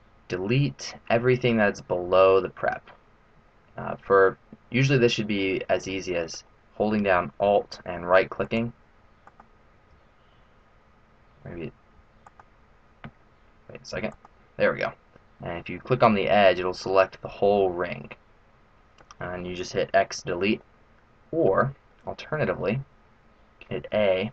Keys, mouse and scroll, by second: 4.3 middle click, 8.4 right click, 9.2 right click, 12.2 ctrl+right click, 14.1 alt+right click, 17.3 middle click, 20.6 middle click, 21.9 middle click.